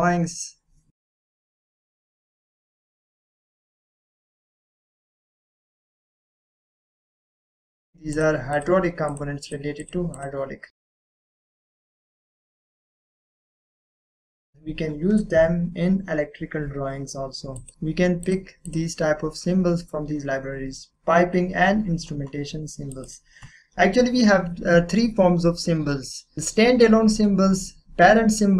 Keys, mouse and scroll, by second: 8.1 click, 14.5 click, 17.5 click, 23.0 click.